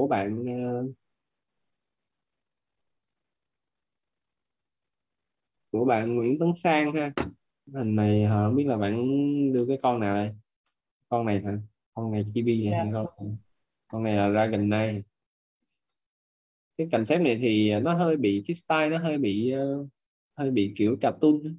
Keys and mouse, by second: 1.4 click, 9.3 middle click, 18.8 middle click.